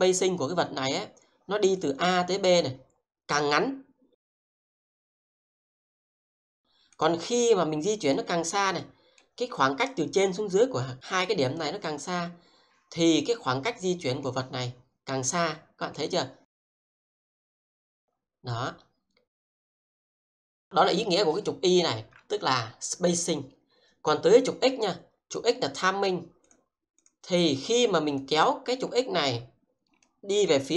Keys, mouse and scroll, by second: 1.8-7.3 drag, 8.1 middle click, 16.6 click.